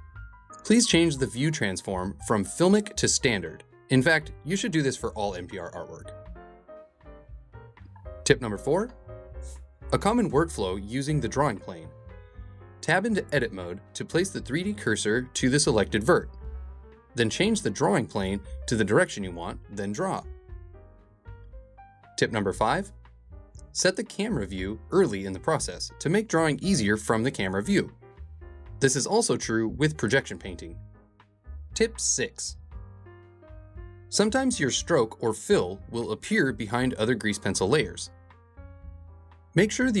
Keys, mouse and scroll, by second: 2.2-3.4 drag, 5.4-8.3 drag, 8.5 ctrl+Tab, 9.9-10.9 drag, 11.6 KP_3, 13.6-16.8 drag, 17.4-18.5 middle drag, 19.3 Tab, 20.1 2, 20.4 click, 21.0 g, 21.6 g, 22.5 ctrl+Tab, 33.1-36.1 middle drag, 36.1 click, 37.1-40.0 drag.